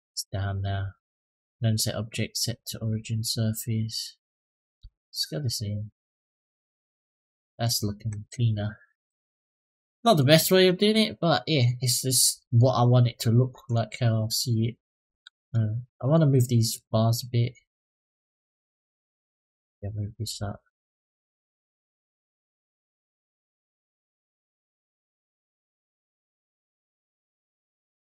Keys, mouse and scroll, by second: 0.1 middle drag, 1.3-2.8 drag, 3.4 click, 4.6 s, 6.2 click, 6.6-7.4 middle drag, 7.8-8.8 scroll down 3, 8.8-9.2 scroll down 2, 9.2-9.9 middle drag, 10.2-10.6 shift+middle drag, 10.8-11.9 middle drag, 12.1 middle drag, 13.1-13.5 middle drag, 14.7-15.9 middle drag, 16.5 click, 17.3-18.3 drag, 18.8 click, 19.5 click, 20.3-20.9 middle drag, 21.1 click, 22.0 click, 22.7-23.9 drag, 24.2 click, 25.7 click, 26.2 click, 27.1 click, 27.5 click.